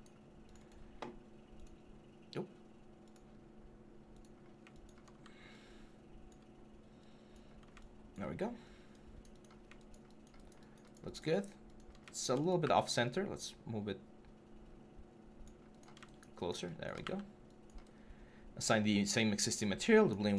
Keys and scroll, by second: 8.4 3, 12.4 w.